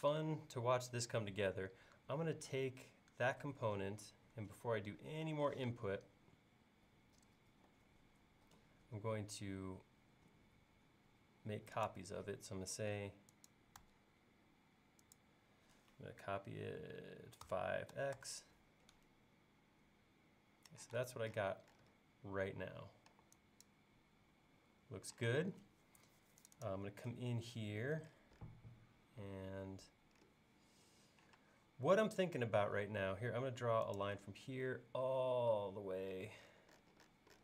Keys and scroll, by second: 5.6 q, 17.5-18.0 typing, 21.0 space, 23.2 e, 25.4 space, 29.3 l, 31.4 space, 32.9 l.